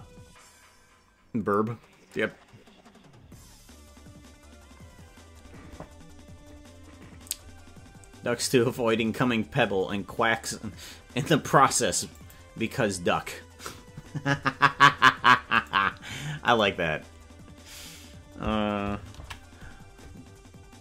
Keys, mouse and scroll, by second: 15.8 right click, 16.7-19.2 right drag.